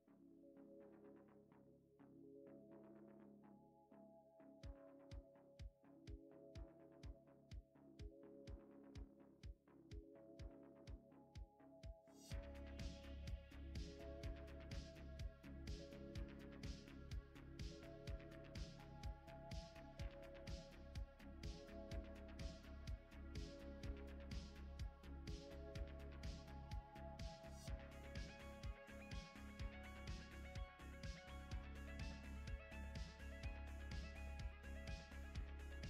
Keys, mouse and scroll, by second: 0.3 middle click, 2.4 click, 7.7 click, 8.4 click, 9.1 right click, 11.7 click, 12.5 F2, 17.3 click, 17.9 click, 18.2 right click, 19.9 click, 21.6 click, 22.9 click, 23.8 click, 24.2 right click, 26.2 click, 26.7 F2, 29.1 click, 30.7 click.